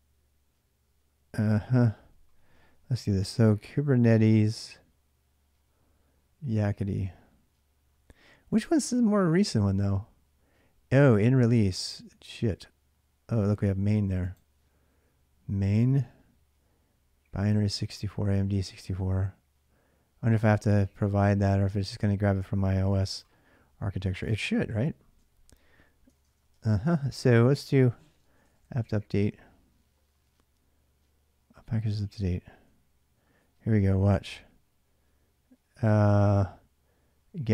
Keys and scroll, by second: 25.9-28.9 typing, 32.0 ctrl+[, 32.2 k, 32.3 k.